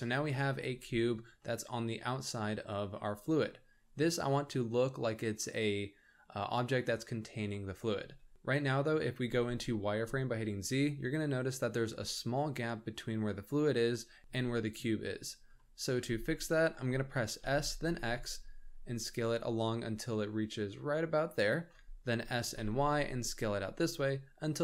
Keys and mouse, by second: 0.1 z, 1.4-3.5 middle drag, 8.3 z, 8.7 middle drag, 9.2 z, 10.0-11.7 shift+middle drag, 13.9-14.2 middle drag, 14.3-14.8 shift+middle drag, 15.5-15.9 shift+middle drag, 16.1 z, 17.4 s, 22.2 s.